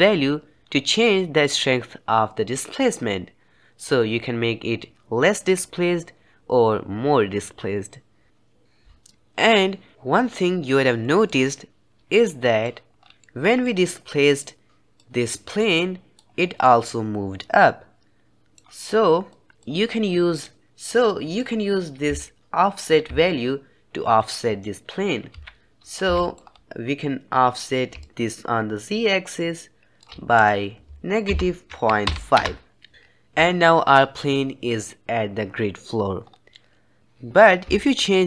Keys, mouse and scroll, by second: 11.2-12.9 middle drag, 12.9 scroll down 2, 13.1-14.9 middle drag, 14.9-16.5 drag, 16.5-19.2 middle drag, 19.2 click, 19.5-20.8 drag, 20.8-22.1 middle drag, 22.1 shift+click, 23.1-24.2 shift+drag, 25.2 KP_1, 26.1 shift+middle drag, 26.3-27.9 scroll up 2, 27.9-32.9 shift+drag, 36.1-36.4 scroll down 2, 36.4-37.8 middle drag, 37.8-38.2 shift+drag.